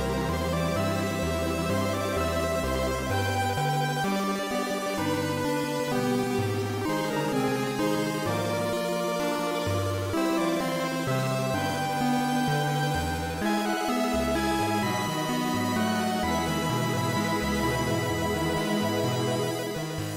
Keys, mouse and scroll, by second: 19.6 right click.